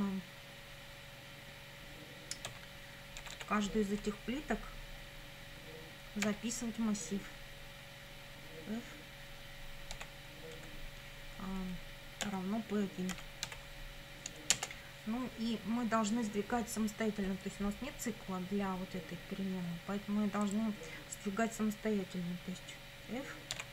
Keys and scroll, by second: 2.5 a, 3.2 r, 6.3 [, 10.0 f, 10.6 Right, 12.2 =, 13.1 p, 13.5 1, 14.5 Return, 23.5-23.7 typing.